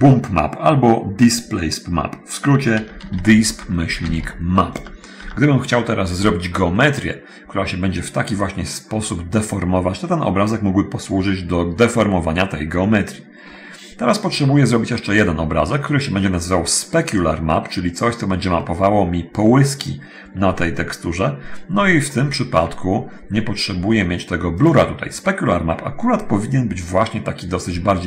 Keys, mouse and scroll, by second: 2.6-4.9 typing, 4.9 Return, 5.4 Return, 15.4 Escape, 18.8 middle click, 22.1-23.6 middle drag, 24.8 click.